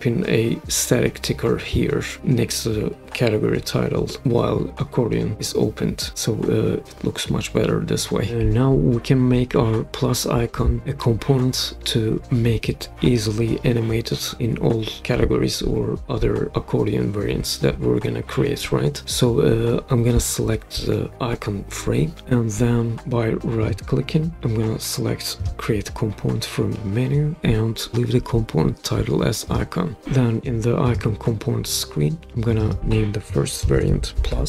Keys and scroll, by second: 33.4-34.4 typing.